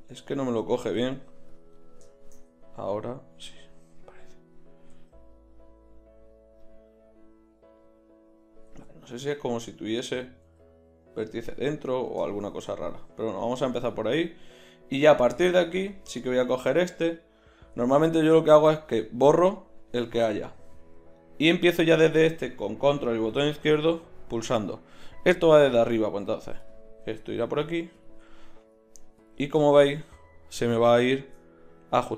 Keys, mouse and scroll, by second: 1.0 g, 5.0 g, 8.4 g, 8.7 z, 10.4 g, 11.3 z, 14.0-17.8 right drag, 15.0-17.8 drag, 17.8 x, 20.4 right click, 26.6-31.0 drag.